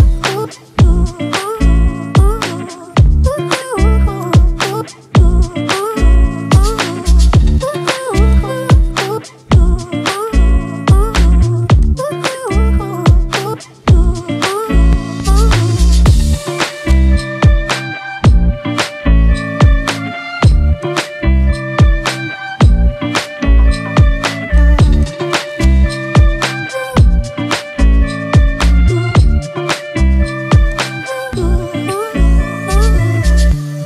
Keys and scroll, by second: 28.5 Left, 31.8 Return.